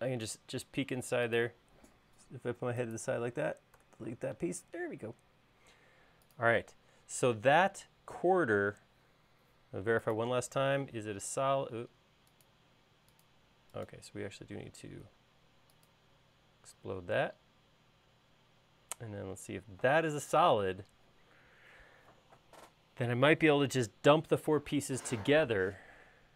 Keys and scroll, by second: 4.4 BackSpace, 7.9 space.